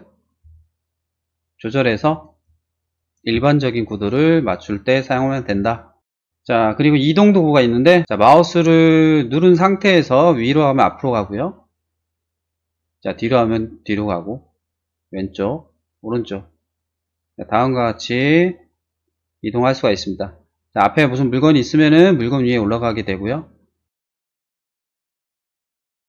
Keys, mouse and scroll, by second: 2.2 click, 3.4 click, 4.0-5.1 middle drag, 9.4-11.4 drag, 11.5-13.6 drag, 14.9-16.4 drag, 14.9 right click, 15.0 right click, 16.5 click, 16.7 click, 16.9 click, 17.3-18.3 drag, 18.5 click, 18.7 click, 18.9-20.1 drag, 20.1-21.3 middle drag, 22.6 click, 23.3 click, 24.6-25.6 drag, 26.0 shift+middle click.